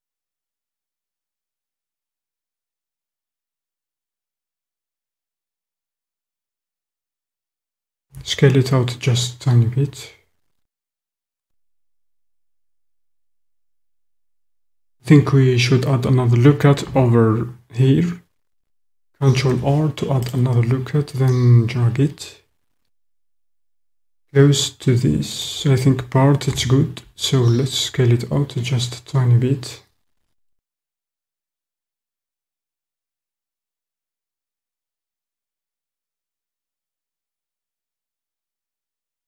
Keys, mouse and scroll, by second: 5.3 click, 7.0 alt+click, 8.0 s, 11.4 click, 12.5 click, 19.3 ctrl+r, 25.5 click, 27.4 s, 35.3 click, 38.2 alt+click.